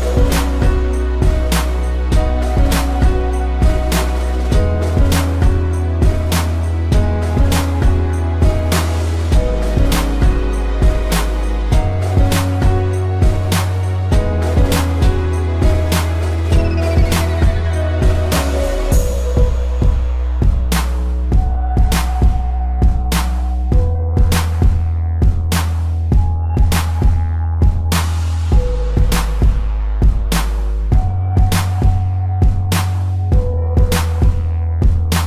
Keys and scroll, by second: 4.5 space, 5.4 ctrl+-, 7.2 space, 8.7 ctrl+=, 9.9 space, 10.9 a, 12.2 ctrl+-, 12.4 space, 12.7 p, 13.0 ctrl+=, 13.2 space, 13.9 ctrl+=, 14.1 space, 15.4 space, 17.2 space, 18.8 ctrl+-, 19.3 space, 21.4 space, 22.8 v, 24.1 space, 25.5 space, 26.6 space, 27.3 space, 28.8 space, 30.4 space, 30.8 ctrl+z, 32.4 space, 32.8 p.